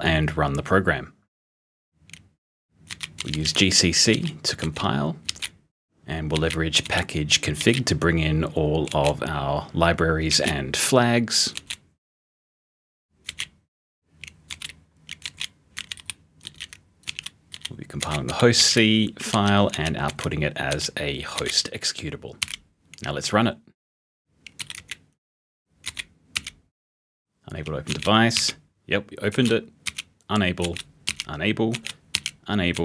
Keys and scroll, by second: 2.9-6.4 typing, 8.9 z, 10.1-11.5 typing, 13.2 s, 14.5-22.3 typing, 24.3-32.8 typing.